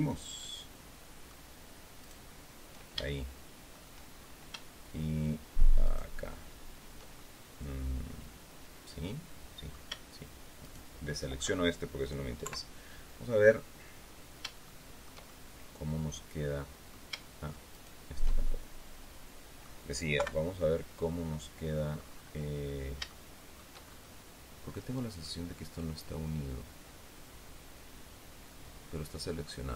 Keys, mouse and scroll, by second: 0.3-1.3 shift+middle drag, 1.9 shift+right click, 2.9 shift+middle click, 4.0-4.4 shift+scroll down 3, 5.7 shift+right click, 7.0-9.8 shift+middle drag, 10.5 shift+right click, 12.3 KP_3, 13.1-13.7 scroll down 2, 13.9-14.3 scroll up 2, 14.6 shift+middle click, 14.6 shift+scroll up 2, 15.1-17.0 shift+middle drag, 17.6 shift+right click, 18.3-19.7 shift+right drag, 20.1 KP_3, 20.8-21.4 scroll down 2, 21.8-22.3 scroll up 2, 22.9 shift+right click, 23.7-24.2 shift+scroll up 3, 25.1-29.7 drag.